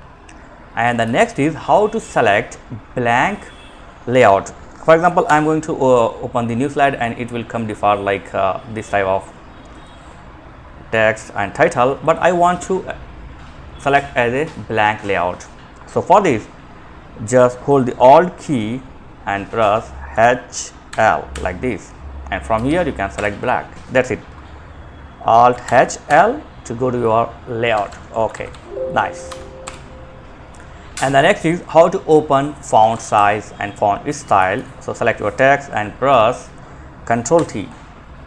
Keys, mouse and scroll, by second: 0.1 Down, 0.1 Down, 4.4 ctrl+n, 8.9-12.1 drag, 20.1 alt+h, 20.6 l, 21.7 Down, 21.9 Down, 22.3 Return, 24.8 alt+h, 25.2 l, 26.9 Escape, 27.5 alt+f, 27.6 c, 28.5 Right, 28.8 Return, 32.1 Home, 32.2 End, 33.2 Down, 33.5 Down, 33.6 Down, 33.7 Down, 36.6 ctrl+t.